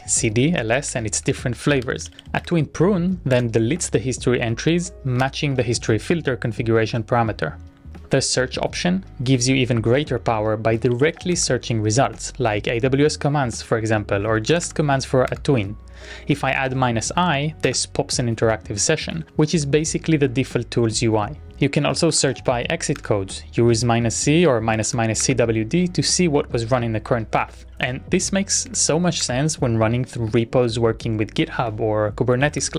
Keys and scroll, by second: 0.0-2.7 typing, 3.6 Return, 7.9 typing, 10.7-12.0 typing, 14.2-15.1 typing, 15.5 Return, 16.6 Up, 17.6-18.4 typing, 21.0 Up, 21.0 Tab, 21.9-23.0 typing, 23.2 Return, 23.9 Up, 23.9 Tab, 24.8 space, 24.8 ., 25.4 Return, 27.7 Up, 27.7 Tab, 28.5 BackSpace, 28.7 shift+`, 29.4 Return, 32.0-32.7 typing.